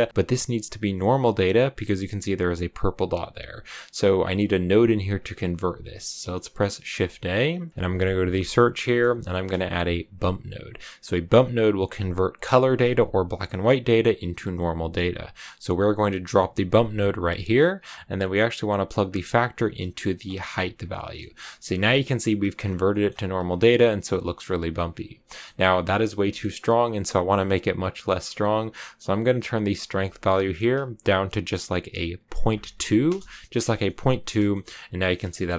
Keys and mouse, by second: 0.1-1.2 drag, 6.8 shift+a, 19.0-20.3 drag, 21.2 shift+middle click, 22.8 click, 23.2 click, 25.3 click, 29.7-33.6 drag, 34.3 shift+click, 35.1 shift+middle click.